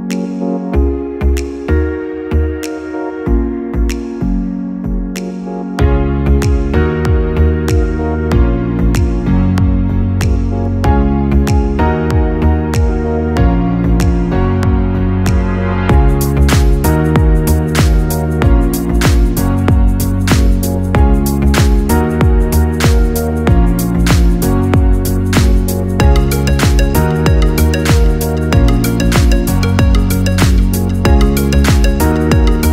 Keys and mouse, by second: 0.7 click, 4.8 a, 5.9 i, 14.1 click, 17.8-19.0 middle drag, 19.0 shift+drag, 21.9 x, 24.2-26.9 middle drag, 26.9 click, 28.2 shift+click, 30.9 x.